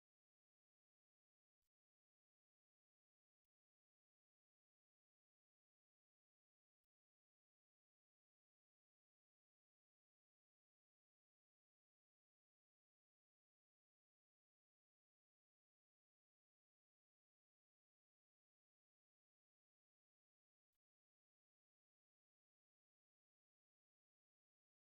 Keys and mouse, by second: 0.1 middle click, 3.3 middle click, 4.6 middle click, 5.8 k, 13.2 k, 17.4 1, 18.5 a, 18.8 right click, 20.1 right click, 20.5 g, 22.9 c, 24.3 w.